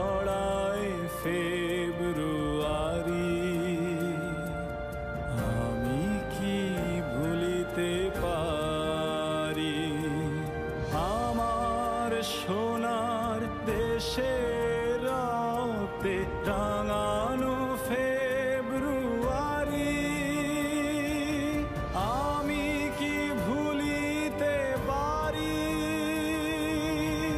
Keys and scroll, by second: 2.6 Up, 2.8 Up, 5.2 Down, 14.1 ctrl+KP_Subtract, 14.8 KP_Subtract, 17.0 a, 17.6 s, 18.4 KP_Subtract, 21.1 ctrl+shift+], 25.7 space.